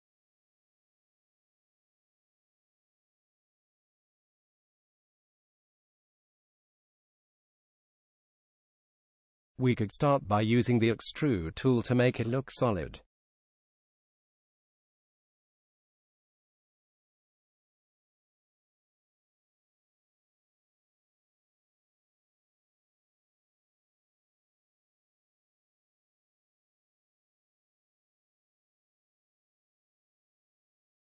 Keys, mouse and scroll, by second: 4.6 f, 13.0 e, 28.3-30.2 middle drag.